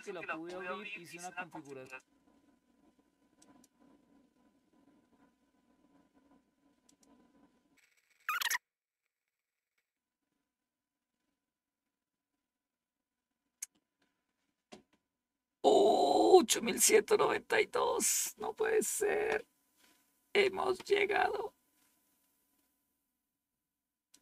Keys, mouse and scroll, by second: 1.5-2.5 drag, 3.3 click, 6.7 click, 8.2 click, 24.0 click.